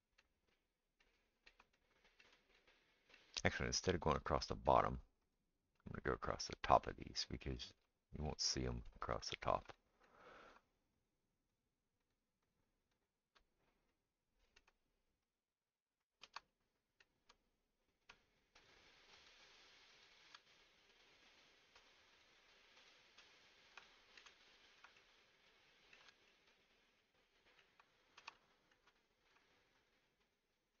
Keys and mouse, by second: 4.9-6.7 middle drag, 5.2 click, 11.5 shift+click, 12.5 shift+click, 12.9 shift+click, 12.9 shift+middle click, 15.3 shift+click, 15.3 shift+middle click, 16.1 shift+click, 16.1 shift+middle click, 18.6 shift+click, 18.6 shift+middle click, 19.3 shift+click, 19.3 shift+middle click, 19.9 shift+click, 19.9 shift+middle click, 22.1 shift+click, 22.1 shift+middle click, 28.4 shift+middle click, 28.8-30.8 right drag, 29.9 shift+click, 30.2 shift+click, 30.7 shift+click.